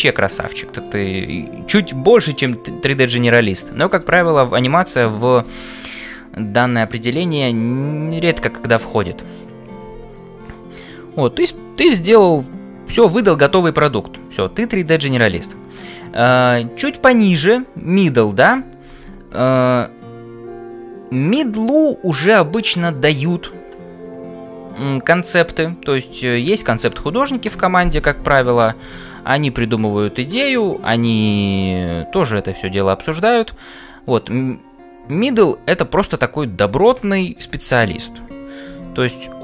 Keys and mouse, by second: 28.5 middle click, 29.7-34.6 drag, 35.8 shift+middle click, 36.6 middle click.